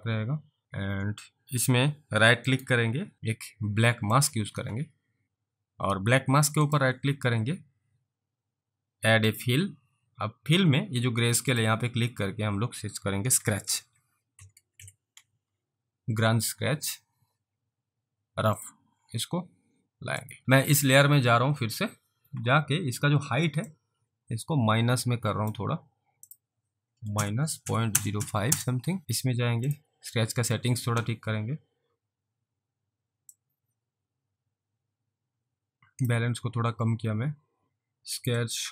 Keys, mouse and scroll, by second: 0.6 click, 2.5 right click, 4.2 click, 6.7 right click, 9.3 click, 11.5 click, 13.4-15.3 typing, 18.6 click, 20.3 alt+click, 23.8 click, 26.3 click, 26.9-28.7 typing, 29.0 click, 33.6 click, 38.5 click.